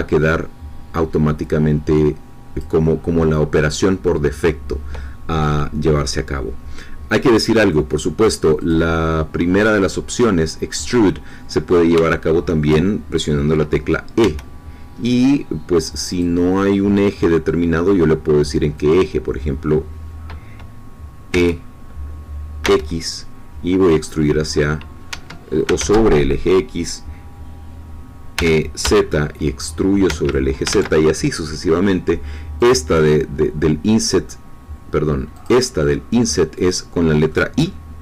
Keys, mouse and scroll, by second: 7.7 middle click, 8.6 click, 11.2 middle click, 12.0-13.2 shift+middle drag, 14.2 e, 16.1 click, 18.9-21.3 drag, 21.3 e, 22.6 x, 25.1 Escape, 28.3 e, 28.8 z, 30.0 Escape, 30.7 ctrl+z, 32.5 click, 35.3 click, 36.5 click, 37.3-38.0 middle drag.